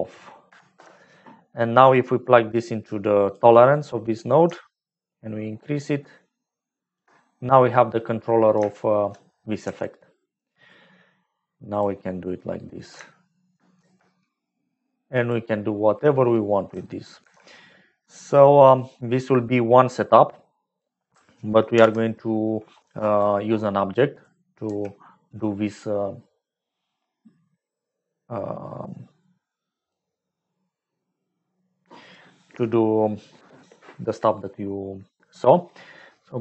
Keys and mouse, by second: 2.6 click, 3.7 click, 4.9-6.9 shift+drag, 8.7 shift+middle click, 9.6 g, 11.7 click, 12.2 middle click, 12.4 click, 13.1 shift+middle click, 13.9 g, 15.7 middle click, 17.3 alt+g, 19.0 middle click, 19.9 click, 21.7 ctrl+j, 24.2 click, 24.6 g, 28.8-30.0 drag.